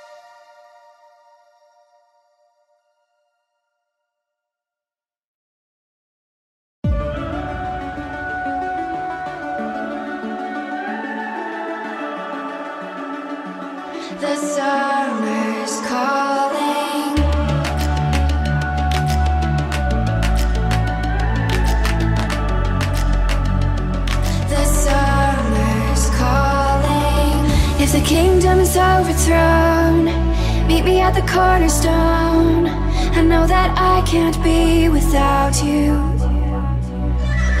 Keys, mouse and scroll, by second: 1.8 click, 2.2 scroll up 1, 2.5 middle click, 4.1 e, 6.7 click, 7.9 s, 8.1 z, 8.9 KP_0, 11.2 click, 11.7 middle click, 12.5 e, 15.1 click, 15.1 z, 15.8 e, 17.6 5, 19.5 click, 20.4 m, 21.6 click, 22.2-22.9 scroll down 2, 22.4 middle click, 23.3 middle click, 24.3 click, 25.6 middle click, 26.0 scroll down 1, 26.3 middle click, 27.2 middle click, 27.4 click, 27.9 Tab, 29.1 g, 30.2 z, 30.8 click, 31.1 middle drag, 31.6 click, 31.8-32.2 middle drag, 32.4 click, 32.7-33.8 middle drag, 35.9 middle drag, 36.9 s, 36.9 y, 37.4 click.